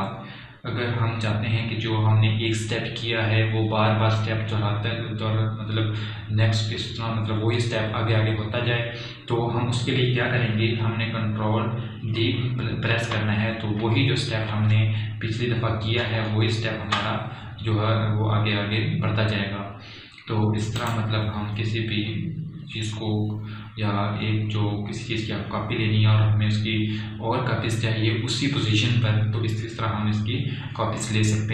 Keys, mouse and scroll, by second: 3.1 typing, 12.5 ctrl+Num_Lock, 13.8 ctrl+d, 17.8-18.6 scroll down 2, 22.4 click.